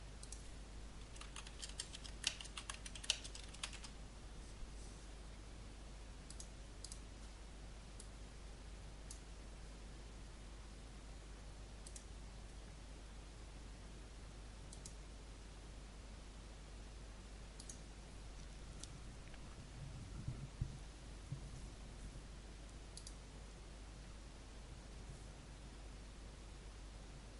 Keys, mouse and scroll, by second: 0.7-4.3 typing, 6.2-9.5 drag, 15.6-18.6 drag, 23.7-27.3 drag.